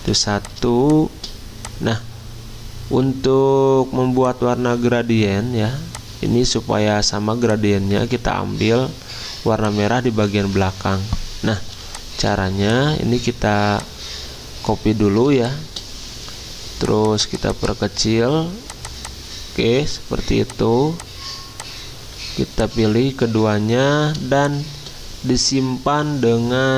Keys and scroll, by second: 5.0 ctrl+z, 8.0 ctrl+z, 10.4 ctrl+z.